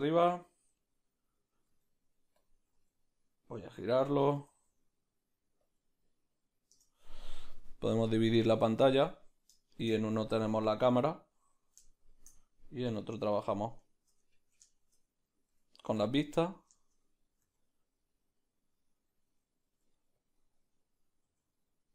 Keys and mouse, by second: 8.1-9.6 drag, 9.6-11.0 shift+middle drag, 11.0 click, 12.0-13.5 shift+middle drag, 13.5 q, 13.7 q, 14.3 ctrl+middle click, 14.7 shift+middle click, 16.0 q, 16.3-21.9 ctrl+middle drag, 17.4 g, 20.7 q, 21.3 g.